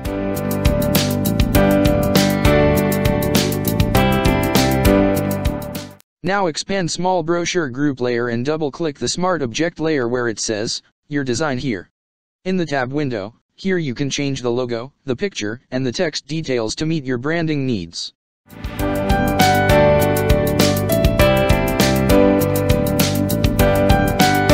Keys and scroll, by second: 2.1 ctrl+-, 11.4 ctrl+space, 11.9 ctrl+space, 17.0 ctrl+c, 18.0 space, 21.0 ctrl+v.